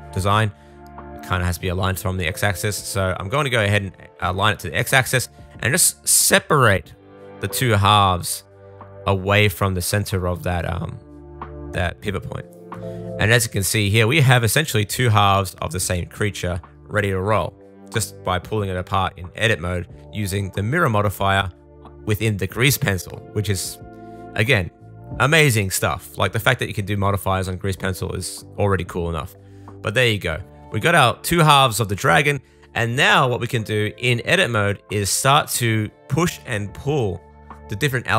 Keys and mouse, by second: 0.1-7.4 drag, 7.4-15.2 middle drag, 14.1 a, 15.2-17.1 drag, 17.1-24.9 middle drag, 24.9-35.8 drag, 35.8 middle click, 35.9 click, 36.1-38.1 middle drag.